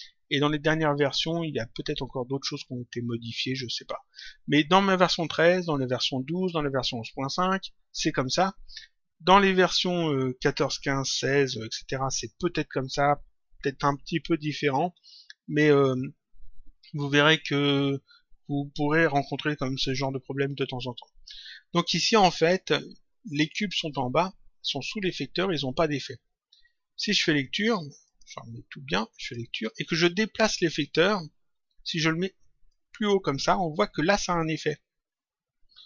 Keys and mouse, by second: 28.0 click, 29.1 click, 30.7 click, 32.6 click.